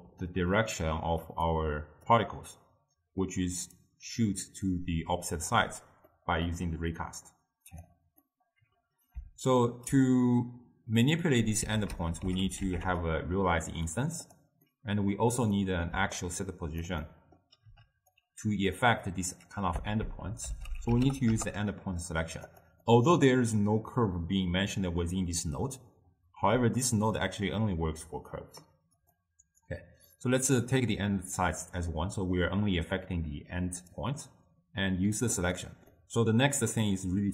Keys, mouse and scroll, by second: 0.7-13.2 drag, 13.2 ctrl+a, 16.3 alt+click, 17.8 m, 18.9-21.4 drag, 21.4 ctrl+a, 29.2-37.3 drag.